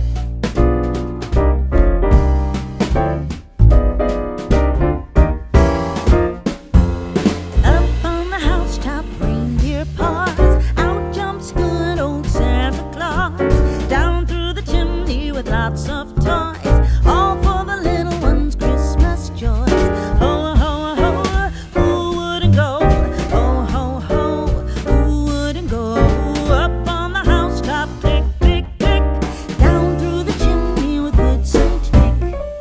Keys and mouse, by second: 0.0 middle click, 1.8 middle click, 2.2 g, 2.5 y, 2.7 right click, 3.7 ctrl+z, 5.1 KP_1, 6.2 g, 6.3 x, 7.6 click, 7.9 shift+d, 8.3 x, 9.5 click, 9.7 middle click, 10.8 Tab, 12.4 shift+middle click, 12.5 middle click, 13.6 shift+a, 15.1 click, 16.3-18.7 typing, 16.8 click, 18.6 KP_Subtract, 19.8 Return, 19.8 KP_Enter, 21.0 s, 22.3 click, 22.5 g, 23.3 click, 23.6 Tab, 24.7 shift+middle click, 25.1 alt+z, 25.2 click, 25.9 alt+z, 26.7 s, 27.8 click, 28.6 Tab, 29.8 g, 29.9 y, 30.6 click, 30.9 Tab, 31.7 g, 31.9 y.